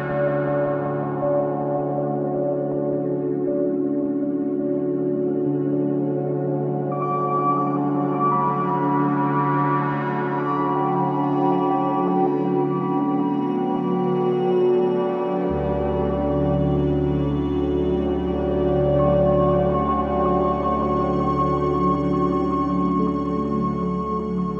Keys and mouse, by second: 0.9-1.8 typing, 1.9 Return, 3.1 click, 4.8 click, 7.0 click, 7.8 click, 8.0 click, 9.0-11.6 typing, 12.7-13.6 drag, 14.5 typing, 15.2 ctrl+alt+drag, 15.7-16.4 typing, 16.4 ctrl+alt+click, 18.5-19.3 typing, 20.5-21.5 drag, 22.0 click.